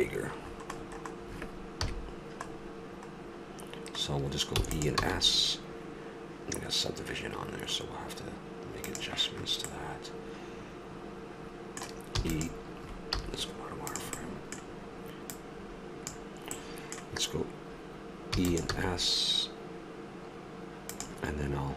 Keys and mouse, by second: 1.9 KP_3, 4.5 e, 5.3 s, 9.7 middle click, 10.0 middle click, 10.2-11.5 middle drag, 12.2 e, 13.9 z, 15.3-16.5 drag, 16.5 middle click, 18.3 e, 19.7 s.